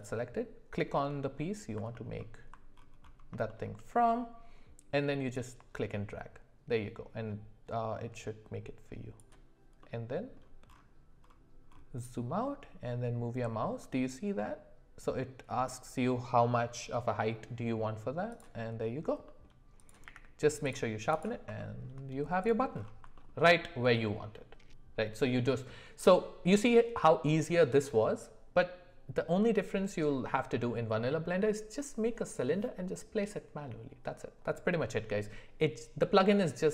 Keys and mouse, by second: 1.9 alt+middle click, 2.2 alt+middle click, 3.4 shift+middle click, 5.3-12.0 drag, 9.8-12.0 middle drag, 12.0-18.4 right drag, 19.2 middle click, 19.8 click, 20.0 q, 21.5 middle click, 23.1 alt+middle click, 23.4 alt+middle click.